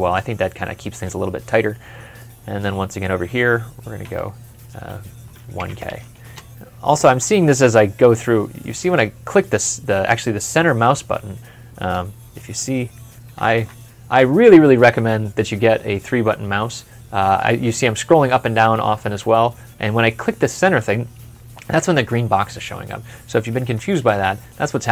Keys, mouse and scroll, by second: 2.0 middle click, 3.9 typing, 5.4-5.7 typing, 6.1 Return, 8.4 middle click, 13.3 ctrl+F11.